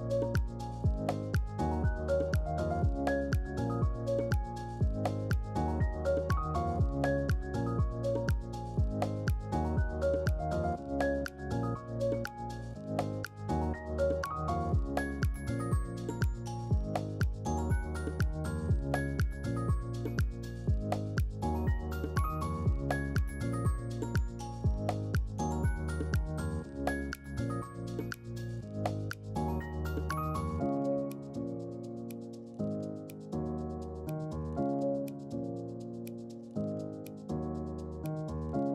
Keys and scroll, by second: 0.3 y, 4.0-5.2 typing, 8.1-8.9 typing, 18.2 ctrl+c, 18.3 ctrl+v, 22.3 ctrl+g, 33.3 ctrl+q, 34.1 ctrl+q.